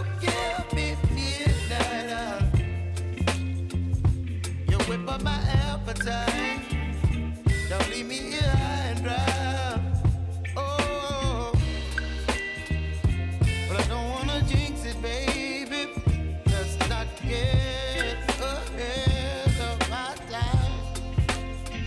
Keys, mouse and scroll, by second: 2.1-3.5 drag, 3.5 click, 4.5 space, 6.7 space, 7.3-8.9 drag, 8.9-10.6 alt+drag, 10.9 space, 13.6 space, 14.9 click, 17.5 click, 19.6 ctrl+d, 20.1 r, 21.0 click.